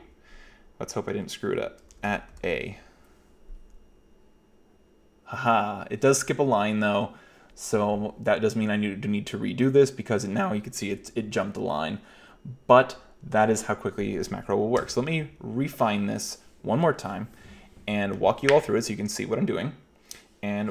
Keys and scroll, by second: 1.9-2.3 typing, 14.8 k.